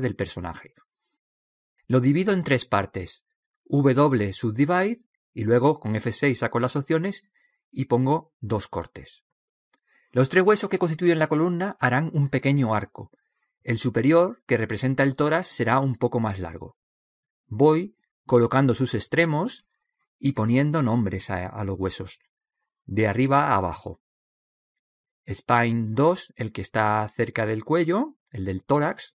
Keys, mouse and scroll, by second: 1.6 right click, 3.8 w, 6.5 F6, 9.5 right click, 10.8 click, 13.0-14.5 drag, 14.5 middle click, 14.7 right click, 15.2-16.3 middle drag, 16.4 click, 17.1 right click, 17.8-18.9 middle drag, 18.9 click, 19.7 right click, 20.9 click, 21.7 right click, 22.9 click, 23.8 right click, 24.5 middle click, 25.2 click.